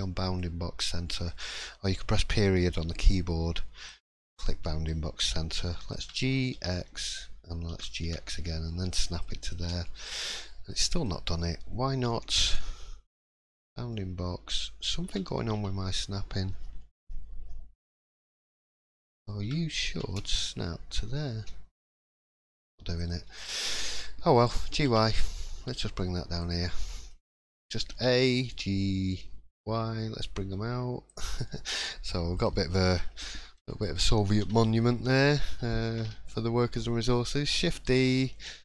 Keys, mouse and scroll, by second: 0.8 middle click, 4.5 right click, 5.6 middle click, 6.0 g, 9.8 middle click, 10.2-10.7 scroll down 3, 10.5-12.0 scroll up 3, 10.7 middle click, 12.0 scroll up 1, 13.9 middle click, 15.0 g, 23.2-24.1 scroll down 4, 23.5 middle click, 24.6 g, 26.6 scroll down 4, 26.9 middle click, 27.3 shift+middle click, 27.9 a, 28.5 g, 31.5 middle click, 31.8 scroll up 1, 32.3 click, 32.3 scroll up 3, 32.8 middle click, 33.3 shift+middle click, 34.4 l, 34.8 middle click, 35.2 scroll down 3, 37.5 shift+d.